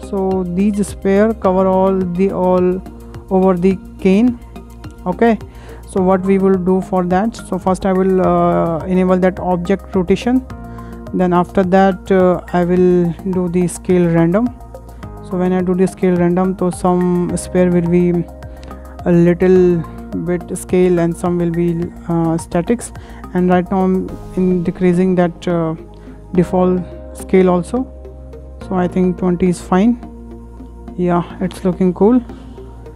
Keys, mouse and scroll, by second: 0.7-1.1 scroll up 3, 1.1-6.5 shift+middle drag, 6.5-7.0 scroll down 3, 7.0 shift+middle click, 10.1-10.4 drag, 13.8 click, 17.5-17.8 scroll up 3, 18.0-21.0 shift+middle drag, 23.8 click, 25.8 scroll down 3, 26.1-26.5 middle drag, 26.5-26.8 scroll up 3, 26.8 shift+middle click, 27.1 scroll down 2, 27.4-29.0 shift+middle drag, 29.0 click, 29.6-30.7 middle drag, 30.7-31.1 scroll down 3, 31.1-31.7 middle drag, 31.7-32.3 scroll up 4, 32.0 shift+middle click, 32.3 scroll down 4, 32.5-32.9 shift+middle drag.